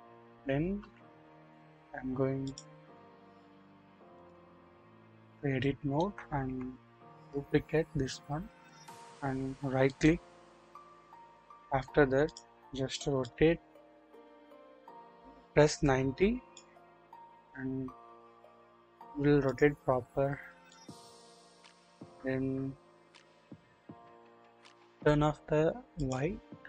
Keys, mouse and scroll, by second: 0.1-0.6 scroll down 1, 0.8 KP_7, 1.4-2.6 scroll up 1, 2.6 click, 5.6-6.0 shift+middle drag, 7.1 shift+d, 9.8 right click, 12.2 click, 13.2-16.5 drag, 15.6-16.0 typing, 19.4 click, 20.6-24.5 drag, 25.9 click.